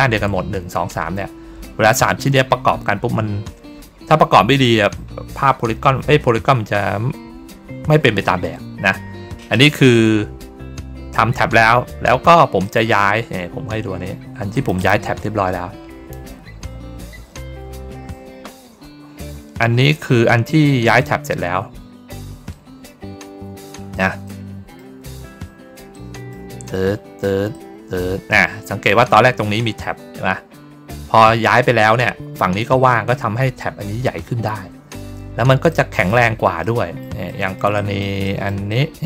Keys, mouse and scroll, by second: 12.5 click, 14.4 click, 14.7 click, 22.7 ctrl+middle click, 23.3 ctrl+middle click, 23.7 ctrl+middle click, 24.1 middle click, 25.2 ctrl+middle click, 25.8 middle click, 26.6 ctrl+middle click, 27.4 ctrl+middle click, 28.4 ctrl+middle click, 34.8 ctrl+middle click, 35.6 middle click, 36.5 middle click, 37.2 middle click, 37.6 middle click, 38.1 middle click, 38.6 middle click.